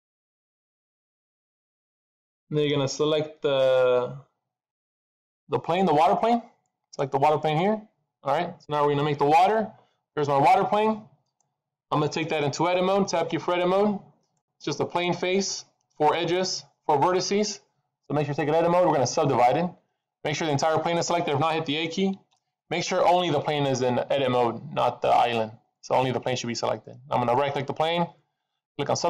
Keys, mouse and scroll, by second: 7.1 click, 9.4 middle click, 13.2 Tab, 13.6 middle click, 14.6-15.6 scroll down 2, 22.1 a, 27.2 right click.